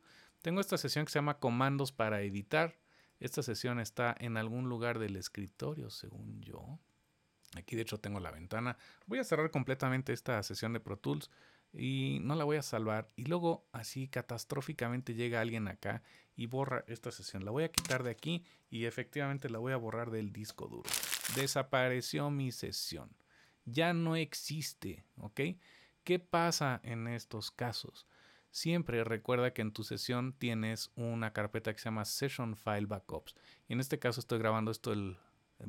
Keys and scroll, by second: 0.4 super+s, 9.4 shift+super+w, 17.3 super+BackSpace, 19.5 shift+super+BackSpace.